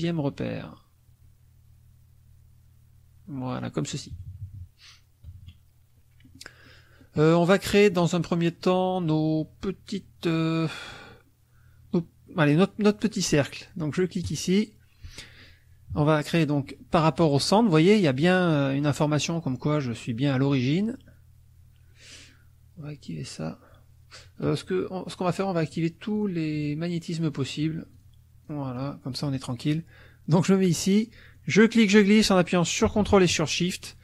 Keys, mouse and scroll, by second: 4.1 KP_Subtract, 5.3 KP_Subtract, 6.2 click, 6.6 click, 7.9 click, 14.2 click, 15.9 KP_Subtract, 23.1 click, 25.2 click, 25.7 click, 26.5 click, 26.9 click, 27.5 click, 27.9 click, 28.4 click, 31.3-34.0 drag.